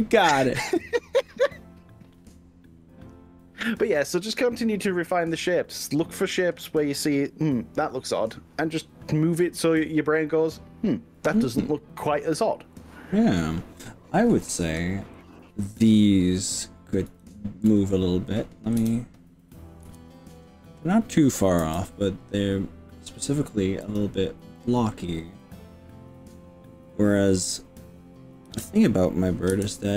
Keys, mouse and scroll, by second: 14.3 click, 15.2 click, 17.4 shift+click, 18.8 KP_3, 19.9 KP_1, 21.6 g, 24.0 click, 24.6 middle click, 26.1 click, 28.5 KP_7, 29.6 KP_9.